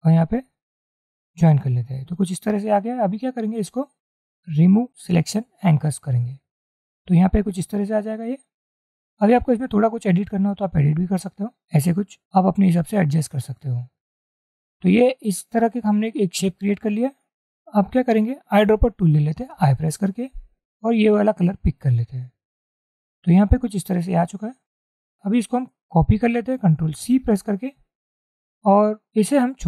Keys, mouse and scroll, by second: 9.6-12.1 drag, 12.7 click, 19.7 i, 27.1 ctrl+c.